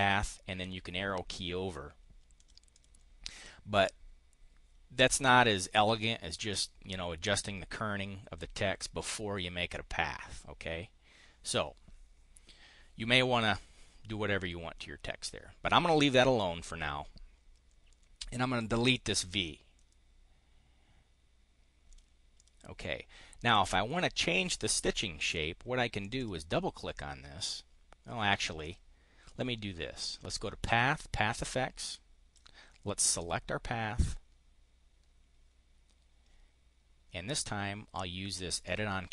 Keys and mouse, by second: 2.3 click, 2.7 click, 18.5 click, 19.6-21.5 drag, 21.8 click, 22.3 click, 23.5 click, 25.9 click, 28.2 click, 29.2 click, 30.6 click, 31.8 click, 33.0 click, 38.6 click.